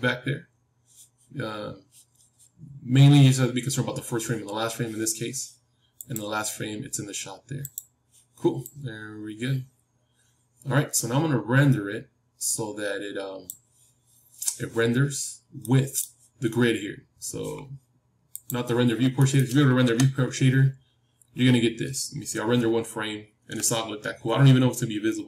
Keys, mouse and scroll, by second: 6.0-13.6 drag, 15.5-18.6 middle drag, 18.6-20.3 drag, 19.8 KP_0, 20.3-22.0 middle drag.